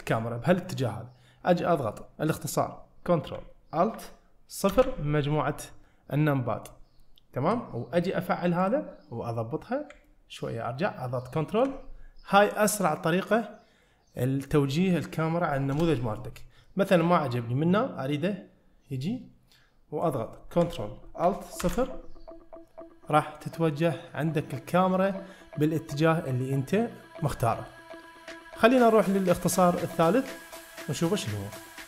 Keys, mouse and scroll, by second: 4.8 ctrl+alt+KP_0, 7.5 n, 8.7-9.5 drag, 9.5-10.0 scroll down 1, 10.1-11.7 ctrl+middle drag, 15.8 KP_0, 16.7-20.1 middle drag, 21.7 ctrl+alt+KP_0.